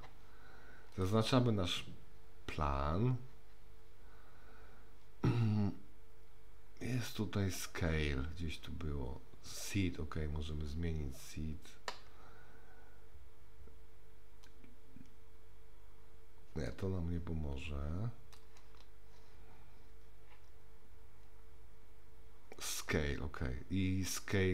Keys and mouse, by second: 0.9 click, 9.9-11.2 drag, 14.5-18.4 drag.